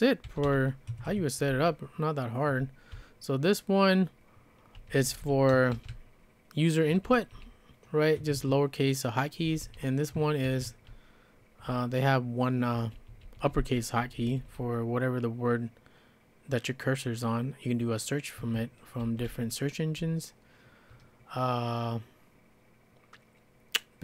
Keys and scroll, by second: 0.0-7.3 typing, 1.1 Escape, 8.2 Escape, 8.4 Escape, 9.5-11.7 typing, 12.8-14.7 typing, 18.4 Escape, 19.0 k, 19.3 k, 19.8 k, 20.1 k.